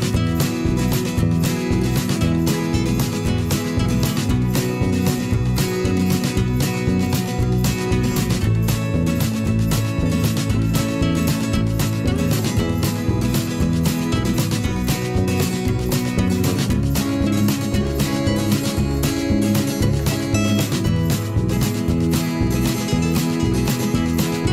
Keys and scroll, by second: 7.5 v.